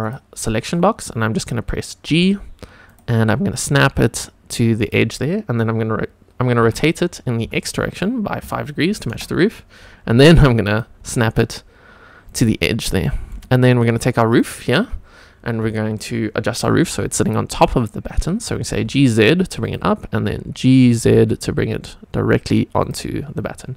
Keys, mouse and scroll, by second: 0.0 click, 2.0 g, 2.8 click, 3.2 g, 4.8 click, 6.5 r, 7.4 x, 8.4 KP_5, 9.1 Return, 10.0 g, 10.7 click, 11.0 g, 12.3 click, 12.5 scroll up 2, 13.0 shift+middle drag, 13.7 scroll up 2, 14.3 click, 14.6-15.1 scroll down 3, 15.1 scroll up 1, 15.7 shift+middle drag, 18.8 g, 18.8 z, 19.6 click, 20.3 scroll up 3, 21.0 g, 21.1 z, 22.8 click, 23.1 scroll down 2.